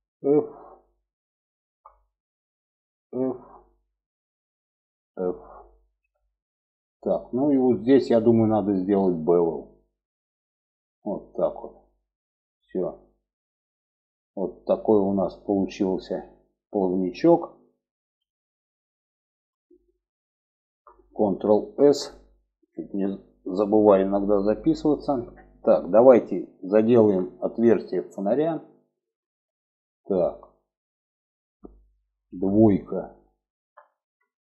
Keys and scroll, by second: 2.5 f, 5.3 f, 21.1 ctrl+s, 31.6 2.